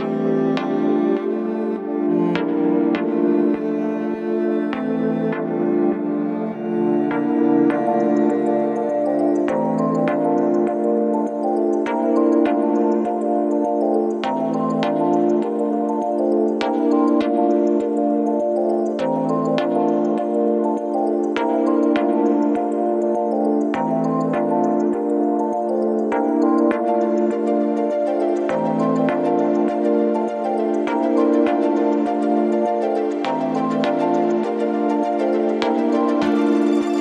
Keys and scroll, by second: 3.3 2, 11.1 ,, 19.1 F1, 19.6 4, 23.2 3, 26.1 F1, 26.3 F2.